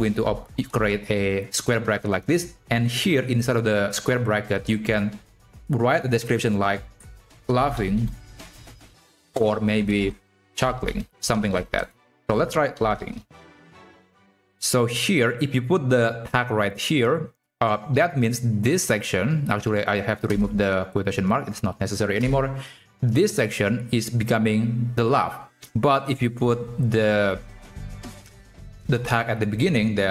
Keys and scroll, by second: 11.1 ctrl+shift+Left, 19.3 BackSpace, 27.8 ctrl+x, 29.8 ctrl+v.